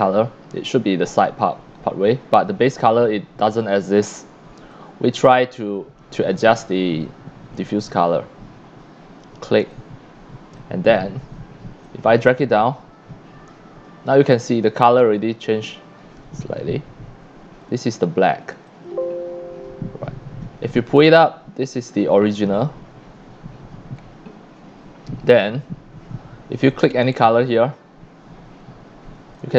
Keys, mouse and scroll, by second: 1.3 click, 4.7-7.0 drag, 7.7 click, 9.7 click, 11.8-17.6 drag, 18.0 c, 18.4 c, 18.6 click, 20.7-22.2 drag, 26.7 click, 27.5 click, 29.1 c, 29.3 click.